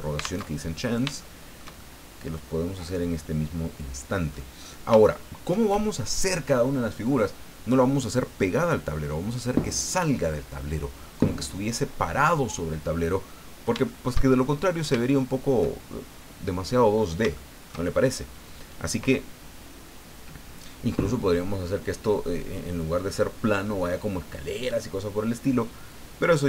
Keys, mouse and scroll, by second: 0.4 alt+Tab, 1.2-4.5 shift+middle drag, 4.6-4.9 scroll up 2, 5.0 shift+middle click, 13.4 scroll down 2, 13.9-14.9 shift+middle drag, 15.1 shift+middle click, 16.4 middle click, 16.9 scroll up 2, 17.3-18.3 shift+middle drag, 18.3 shift+scroll up 2.